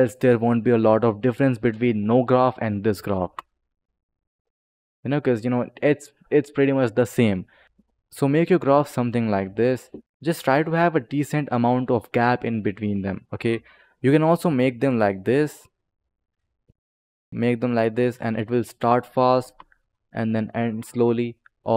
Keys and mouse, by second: 0.1 click, 3.1 space, 7.2 click, 7.6 ctrl+z, 7.6 click, 8.4 click, 9.7 click, 13.6 click, 15.5 click, 16.9 click, 18.1 click, 19.3 space, 21.2 click.